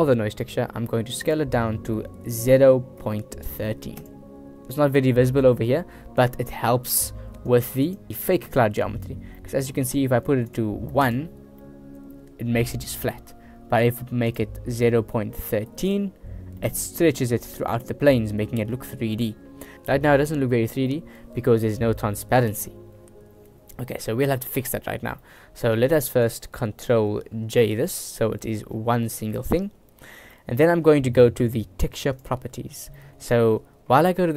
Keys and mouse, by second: 1.3-4.1 drag, 4.8 middle click, 6.4 middle click, 7.6 click, 8.1 shift+middle click, 8.4 shift+drag, 9.4 middle click, 10.6 click, 11.7-13.4 middle drag, 14.4-16.0 drag, 16.7-18.8 middle drag, 19.0 middle click, 21.0-22.5 middle drag, 25.3 middle click, 25.9 click, 27.7 ctrl+j, 28.2 middle click, 30.4 middle click, 31.2 middle click, 32.2 click, 33.1 click.